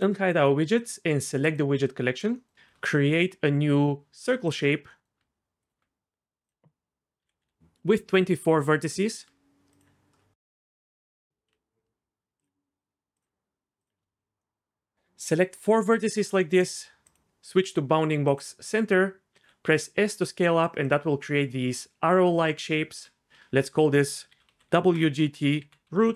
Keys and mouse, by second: 2.5 shift+a, 5.2 Tab, 6.4-7.6 drag, 8.9 Tab, 11.5 KP_7, 13.8 shift+click, 17.1-18.4 drag, 19.3 s, 19.7 s, 20.8-22.7 drag, 22.7 Tab, 23.5 F2, 25.9 o.